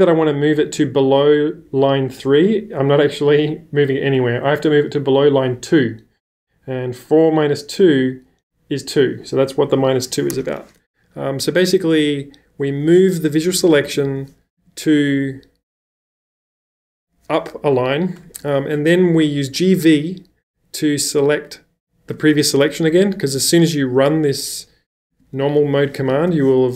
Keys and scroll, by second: 11.7 b, 13.5-14.6 typing, 18.8-19.1 typing, 24.5-26.3 typing.